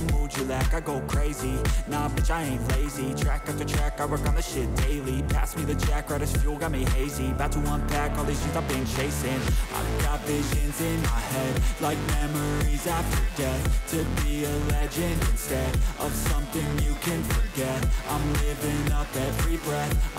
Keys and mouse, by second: 0.3-1.9 drag, 2.6 click, 4.6 click, 6.8-8.1 drag, 9.0 alt+shift+click, 11.0-12.2 drag, 16.5-17.6 drag, 18.5 click.